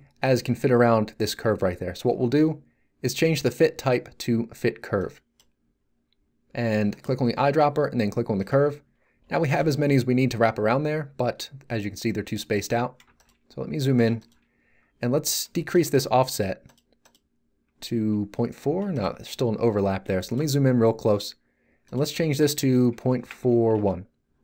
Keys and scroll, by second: 18.0 z, 23.1 Right, 23.5 1, 23.7 Return.